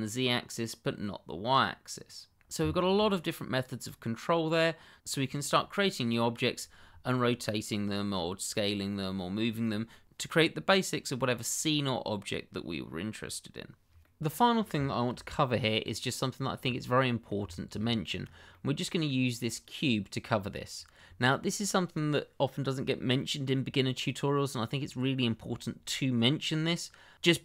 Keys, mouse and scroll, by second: 2.1 click, 2.3-2.6 scroll down 1, 2.6 shift+middle click, 3.0 middle click, 5.4 scroll up 1, 5.8 middle click, 14.0 middle click, 15.1 Delete, 16.0 click, 16.6-16.9 scroll up 1, 16.9 middle click, 17.5 shift+middle click, 17.5 middle click, 17.6 shift+middle click, 17.8-18.2 scroll up 1, 18.5 middle click, 19.3 click, 24.6 scroll down 1.